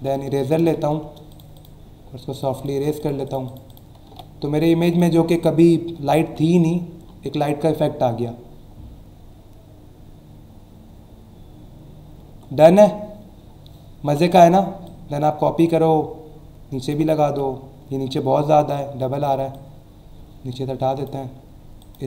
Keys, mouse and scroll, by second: 0.7 shift+e, 1.3 click, 2.3 click, 3.0 click, 4.0 v, 4.8 click, 5.3 click, 6.4-6.7 scroll down 2, 7.0-7.6 alt+scroll up 2, 8.4 alt+scroll down 1, 10.8 alt+scroll down 1, 11.2 alt+scroll up 1, 11.8 alt+scroll up 1, 12.6-13.2 alt+scroll down 2, 13.5 alt+scroll up 1, 14.9 alt+click, 17.2 e, 19.4 typing, 19.5-21.5 drag, 21.8 click.